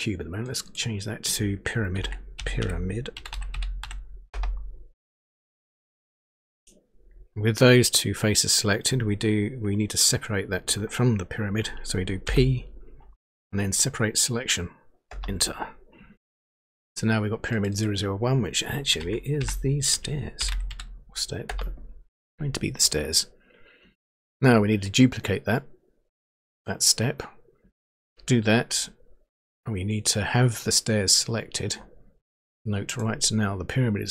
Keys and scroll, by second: 1.6-4.3 typing, 12.3 p, 15.1 Return, 18.9-21.1 typing, 21.4 Return.